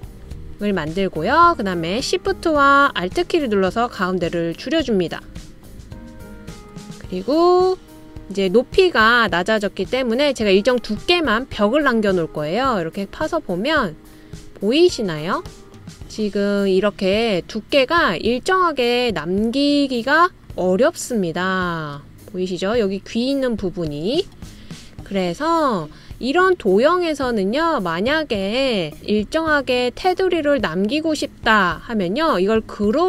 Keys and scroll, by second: 28.9 BackSpace.